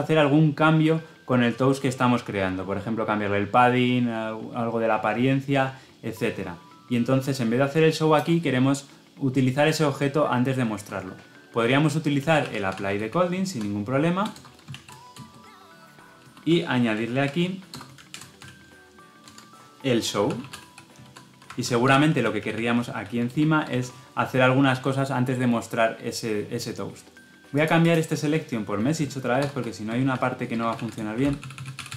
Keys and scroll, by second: 19.1 Tab.